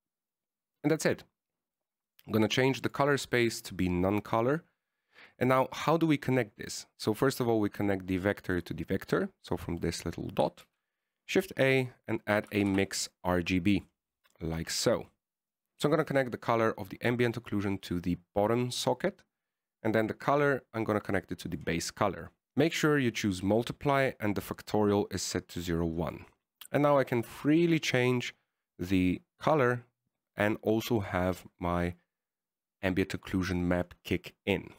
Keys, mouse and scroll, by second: 1.3 middle click, 3.4 click, 4.1 click, 6.8 middle click, 8.3 click, 10.2 middle click, 11.1 middle click, 11.9 shift+a, 15.7 click, 16.6 click, 19.0 click, 21.3 click, 23.1 click, 25.6 click, 27.2 click.